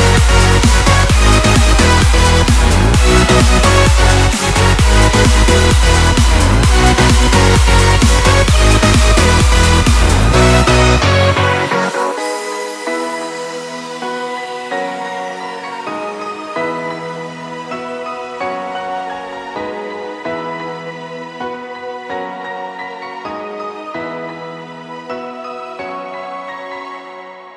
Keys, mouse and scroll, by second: 2.7 click, 7.4 click, 10.4 click, 12.3 scroll down 1, 13.6-18.8 shift+drag, 18.9 click, 19.1 ctrl+t, 19.6-22.7 drag, 26.3 click, 26.9 scroll down 1.